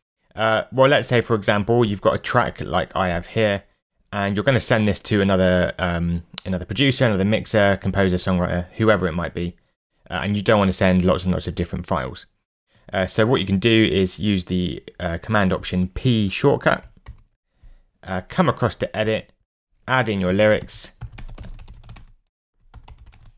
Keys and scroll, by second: 17.1 alt+super+p, 20.1-23.3 typing.